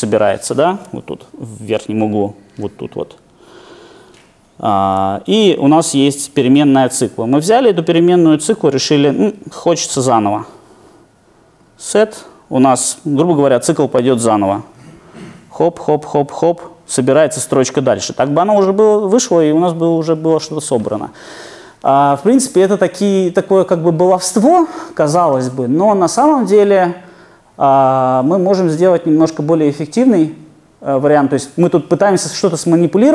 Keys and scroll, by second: 15.1 alt+super+r.